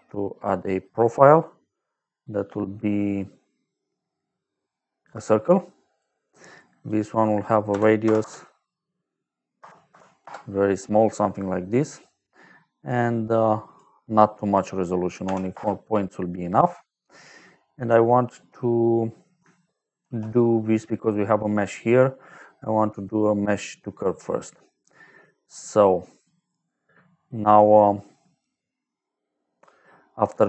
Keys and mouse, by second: 4.9 click, 5.8 click, 6.7 click, 7.6 KP_Decimal, 8.0 KP_0, 8.1 KP_0, 9.5 KP_0, 9.8 KP_1, 10.2 Return, 11.7 click, 14.3 click, 15.2 KP_4, 15.4 Return, 16.7 click, 19.9 shift+a, 23.9 click, 26.3 click.